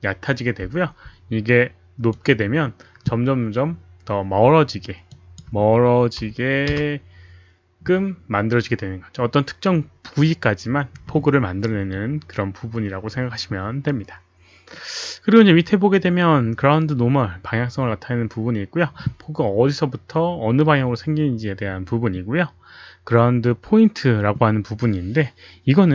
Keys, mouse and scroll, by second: 2.1 click, 3.4 Return, 3.4 KP_1, 3.4 KP_Decimal, 3.4 KP_0, 5.1 click, 6.1 KP_1, 6.7 Return.